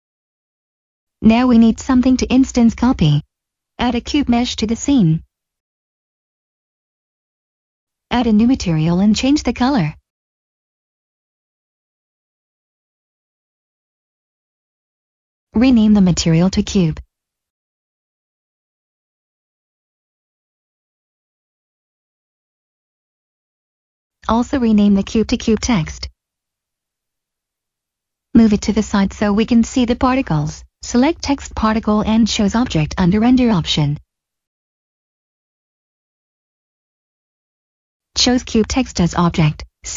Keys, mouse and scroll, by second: 1.1 middle click, 2.8 middle click, 4.5 click, 6.8 middle click, 8.1 click, 11.5 click, 15.8 typing, 17.0 Return, 20.3 click, 24.0-25.5 typing, 26.2 Return, 26.8 middle click, 27.5 click, 28.3 middle click, 30.6 click, 32.1 scroll down 1, 33.9 click, 39.4 click.